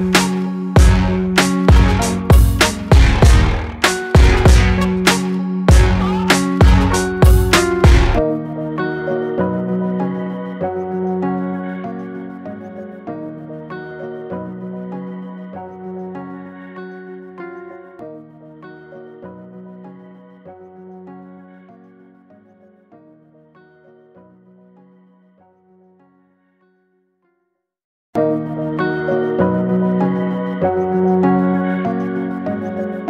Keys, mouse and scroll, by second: 1.0-3.0 drag, 3.0 Tab, 4.5 click, 5.1-8.8 middle drag, 8.8 ctrl+r, 13.1-13.8 scroll up 1, 13.8 middle click, 14.6-15.2 scroll down 1, 15.2-16.8 middle drag, 16.8-18.2 scroll up 1, 18.2 alt+click, 19.9 e, 25.3-26.0 scroll down 2, 26.0-28.9 middle drag, 28.9-29.4 scroll up 1, 29.4-31.4 shift+middle drag, 31.4-31.9 scroll down 1, 31.9 e.